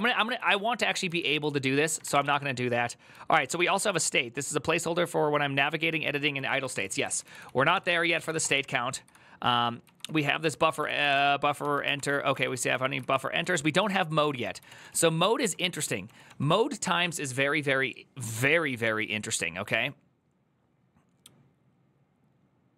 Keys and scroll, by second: 0.0-4.0 typing, 6.1-14.8 typing, 7.5 ctrl+c, 7.6 ctrl+c, 8.7 ctrl+u, 11.7 ctrl+c, 15.8 typing.